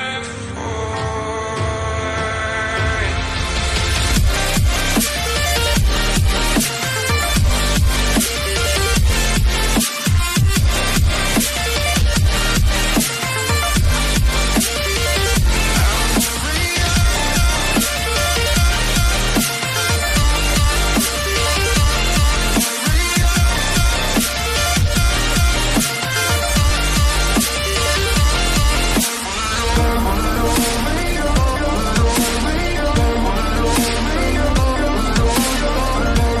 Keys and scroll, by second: 0.0-2.7 typing, 7.6-8.9 typing, 11.9 d, 12.0 ctrl+a, 14.2 ctrl+a, 15.6 shift+Up, 15.8 shift+Up, 16.5 shift+Up, 25.7 shift+Up.